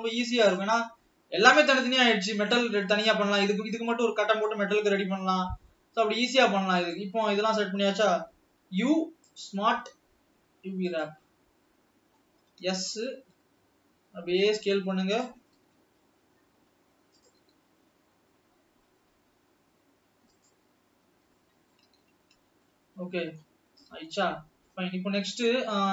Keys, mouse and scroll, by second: 0.5 shift+click, 5.1-5.7 scroll down 4, 6.3 click, 7.2-7.9 scroll down 1, 7.9-8.6 scroll down 1, 11.1 u, 12.6 s, 15.8 g, 17.8 s, 21.4-22.5 middle drag, 22.5 scroll down 2, 22.8-23.5 middle drag, 23.5 scroll up 4, 24.4-25.9 middle drag.